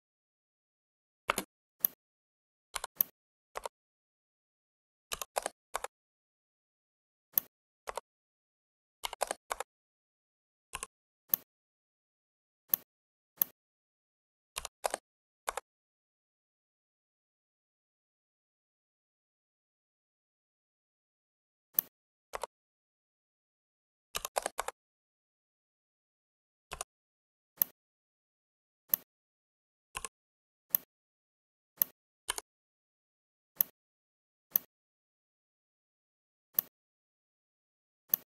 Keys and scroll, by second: 1.2 space, 5.0 typing, 5.6 Return, 8.9 4, 9.0 0, 9.3 Return, 14.4-14.8 typing, 15.3 Return, 24.2 1, 24.4 Return.